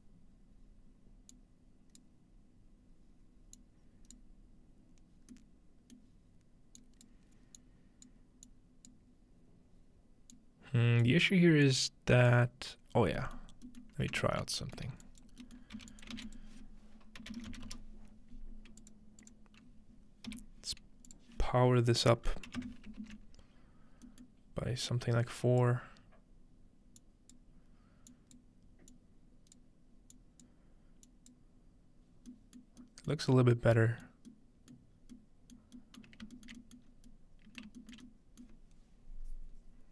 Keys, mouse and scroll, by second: 0.0-1.3 middle drag, 1.3-5.2 drag, 5.3-8.1 middle drag, 6.8-8.9 drag, 10.3 click, 11.7 click, 12.9 scroll down 1, 13.2 middle click, 14.3 ctrl+space, 15.0 click, 15.8-18.2 typing, 15.9-17.8 shift+drag, 18.8 click, 19.2 click, 20.3 p, 21.1 click, 22.6 click, 24.1-27.0 middle drag, 24.9-32.2 drag, 32.3-33.1 drag, 32.7 middle click, 33.7 middle click, 35.0-36.7 scroll down 1, 36.9-38.5 shift+scroll up 2.